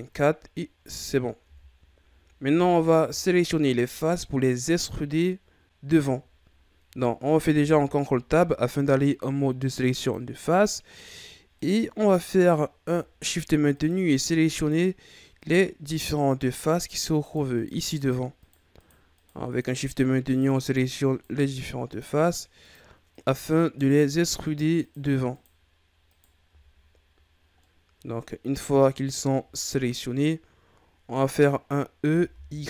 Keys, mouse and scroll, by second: 0.1-1.4 scroll down 8, 1.4 Tab, 1.7-2.1 scroll down 1, 2.1-2.5 scroll up 5, 2.5 Tab, 2.7-3.2 scroll down 2, 3.2-4.7 shift+scroll up 3, 6.2-7.6 ctrl+scroll up 3, 7.6 ctrl+Tab, 11.6 right click, 13.3 shift+right click, 13.7 shift+right click, 14.1 shift+right click, 14.5 shift+right click, 15.4 shift+right click, 15.8 shift+right click, 16.7 shift+right click, 17.2 shift+right click, 17.5 shift+right click, 18.0 shift+right click, 18.4 shift+right click, 18.7 shift+right click, 19.2 shift+right click, 19.5 shift+right click, 19.8 shift+right click, 20.2 shift+right click, 20.6 shift+right click, 21.1 shift+right click, 21.9 shift+right click, 22.6 shift+right click, 23.1 shift+right click, 23.8 shift+right click, 24.4 shift+right click, 24.8 shift+right click, 25.3 shift+right click, 26.1 shift+right click, 26.6-27.6 scroll down 5, 27.6-29.0 middle drag, 29.0-29.5 ctrl+scroll down 4, 29.5-31.4 scroll up 3, 32.0 e.